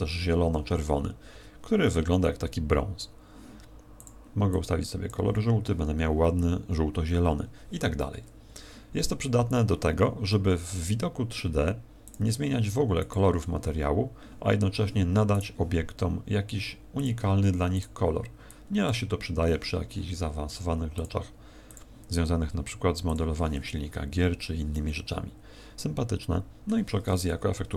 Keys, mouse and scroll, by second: 8.4 Escape, 10.3 middle click, 12.0 click, 15.3 right click, 16.9 click, 17.7 click, 20.9 click, 21.6 click, 23.0 click, 24.7 middle click.